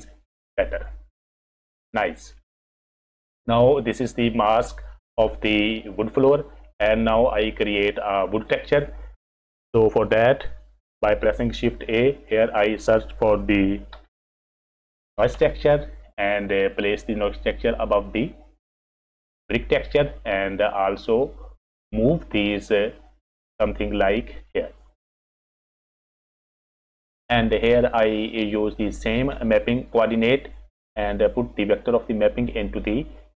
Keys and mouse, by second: 2.6 click, 3.5 click, 6.8 click, 11.7 shift+a, 20.6-21.8 drag, 22.9-24.5 drag, 25.3 click, 28.2 middle click, 31.2-33.3 drag.